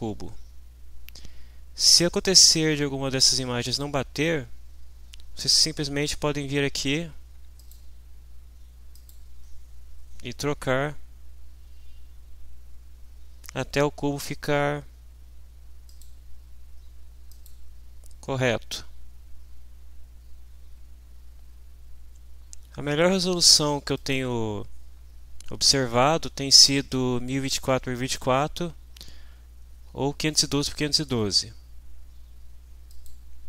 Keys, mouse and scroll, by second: 7.6 click, 8.9 click, 15.9 click, 17.3 click, 24.0 click, 32.9 click.